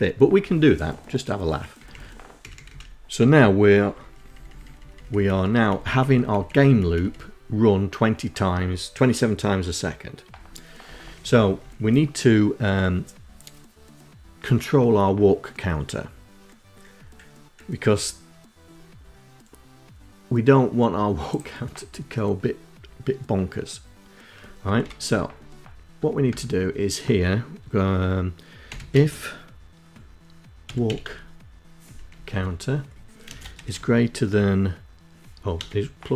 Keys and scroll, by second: 0.7 Down, 1.3 Up, 2.1 Down, 2.3 Down, 2.7 Down, 2.9 Down, 3.1 Down, 3.4 Down, 3.5 Down, 3.8 Down, 4.0 Down, 4.4 Down, 4.6 Down, 4.7 Down, 4.9 Down, 5.1 Down, 5.5 Down, 5.8 Down, 9.7 Down, 9.9 Down, 10.1 Down, 10.3 Down, 10.6 Down, 23.6 Return, 25.2 Tab, 27.3-28.1 typing, 29.3-30.4 typing, 31.0 Down, 31.1 Tab, 32.1 space, 32.4 shift+., 34.4 BackSpace, 35.7 KP_Add, 35.9 space.